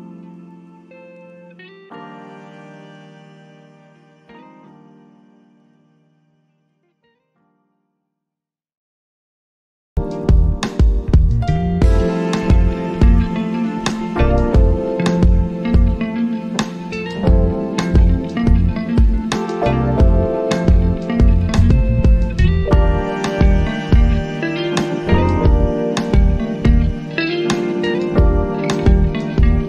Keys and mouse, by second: 6.8-14.4 drag, 14.4-20.4 drag, 27.2-29.6 drag.